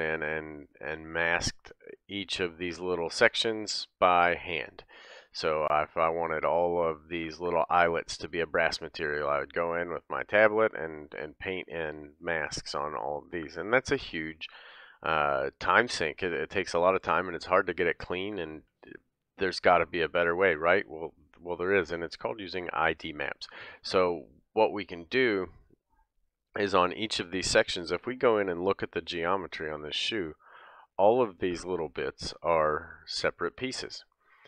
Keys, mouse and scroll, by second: 21.7-22.0 scroll down 2, 22.0-24.9 scroll up 1, 26.7 click, 28.2 Tab, 29.1 scroll up 1, 29.5-31.0 middle drag, 29.5 scroll down 1, 31.0 click, 31.3-34.4 middle drag, 32.3 l.